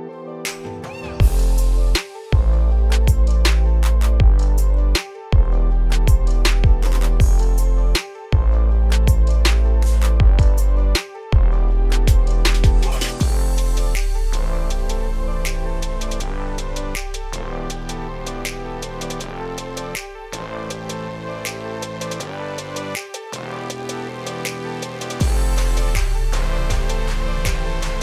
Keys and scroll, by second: 24.5 ctrl+z.